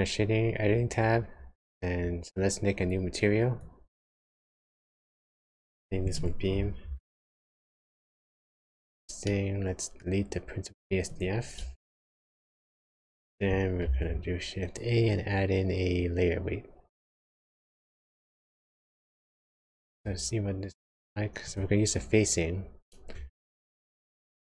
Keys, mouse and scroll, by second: 4.9 click, 5.4 click, 9.3 middle click, 11.1 click, 11.7 x, 12.3 click, 13.8 shift+a, 19.8 ctrl+shift+click, 21.5 ctrl+shift+click, 23.6 shift+middle click.